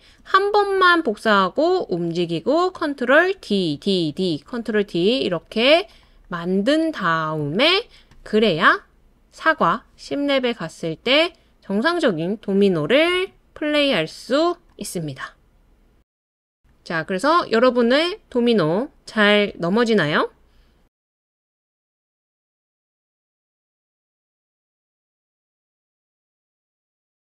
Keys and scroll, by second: 0.1 super+d, 3.4 super+d, 3.7 super+d, 4.1 super+d, 13.1 space.